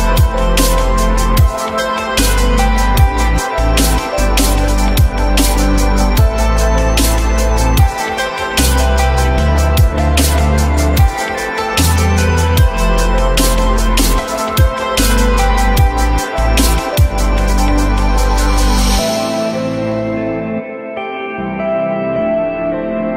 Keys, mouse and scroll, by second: 0.6 ctrl+click, 1.0 ctrl+click, 1.1 ctrl+double click, 1.3 ctrl+click, 6.5 ctrl+click, 8.3 ctrl+click, 8.9 ctrl+click, 9.1 ctrl+double click, 11.3 alt+middle click, 12.3 alt+middle click, 18.4 alt+middle click, 22.3 alt+middle click, 22.7-23.1 alt+scroll up 1.